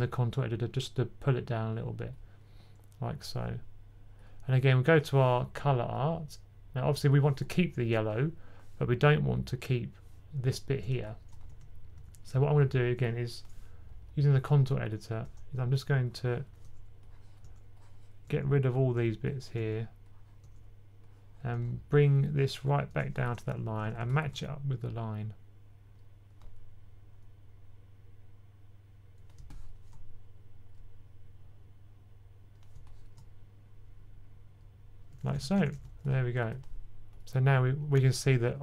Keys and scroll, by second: 11.5-12.3 typing, 23.7-24.1 typing, 35.1-35.6 typing.